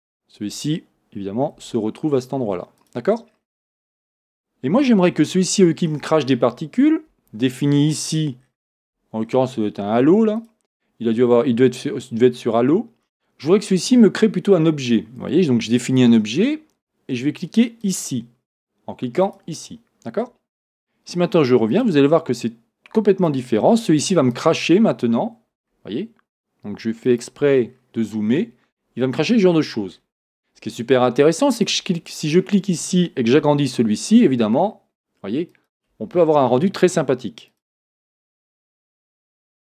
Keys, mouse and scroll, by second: 1.8 g, 3.3-4.2 scroll up 2, 4.2 scroll up 1, 4.3 click, 5.4-10.4 shift+middle drag, 7.7-8.1 scroll down 1, 10.4 scroll down 1, 10.4-18.0 drag, 21.7-24.6 drag, 24.8 scroll up 4, 27.1 click, 27.7-28.1 scroll, 28.4-29.5 scroll up 1, 29.5 scroll down 1, 31.6 click, 33.6 s, 35.7 click, 37.6-39.7 drag.